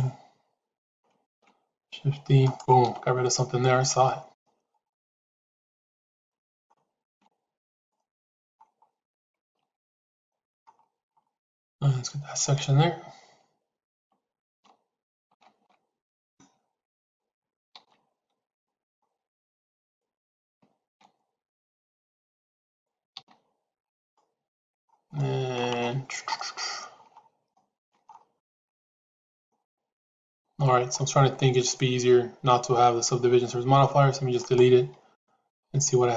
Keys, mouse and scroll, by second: 1.1 shift+e, 4.0-6.5 middle drag, 6.9 shift+e, 7.9 middle click, 10.1 shift+middle click, 12.3-13.3 drag, 14.6 shift+z, 17.9 shift+z, 18.5 middle click, 19.7 click, 20.7 shift+e, 23.3 shift+z, 24.0 middle click, 25.1 shift+middle click, 26.3 middle click, 27.5 shift+middle click, 28.3 middle click, 29.6 middle click, 34.3 click, 35.0 middle click, 35.7 Tab.